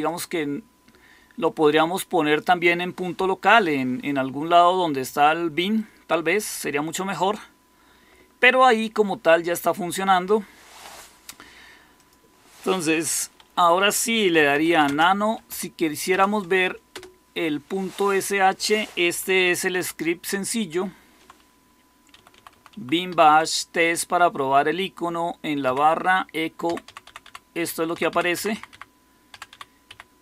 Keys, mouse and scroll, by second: 14.0-15.9 typing, 16.0 Tab, 16.8 Return, 19.7 ctrl++, 20.1 ctrl++, 20.6 ctrl++, 22.1 Right, 22.2 Right, 22.4 Right, 22.6 Right, 22.8-23.7 typing, 25.3-26.1 typing, 26.6 Down, 26.8 Down, 27.2 Down, 27.8 Down, 28.2 Up, 28.4 Up, 28.6 Up, 29.2 Down, 29.4 Down, 29.8 Up, 30.1 Down.